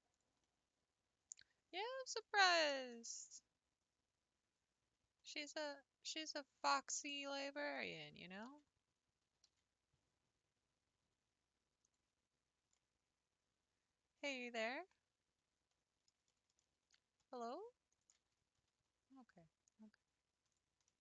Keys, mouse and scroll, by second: 0.4-6.6 middle drag, 6.6 click, 7.7 shift+click, 8.4 x, 9.2 s, 12.7-17.9 middle drag, 17.9 alt+click, 18.6 g.